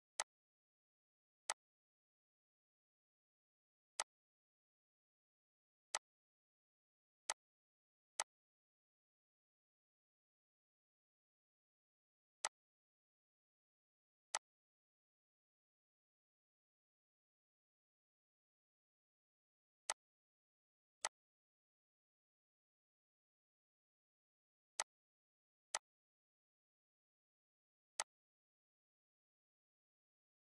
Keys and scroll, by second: 6.3 ctrl+z, 7.3 -, 13.9 ctrl+d, 19.2 -, 20.2 ctrl+s.